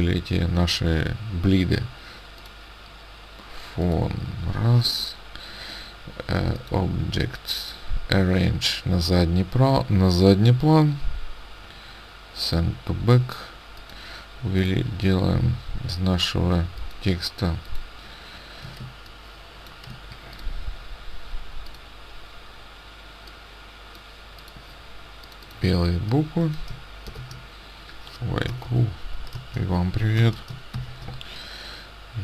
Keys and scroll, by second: 26.9-28.5 typing, 30.7 shift+e.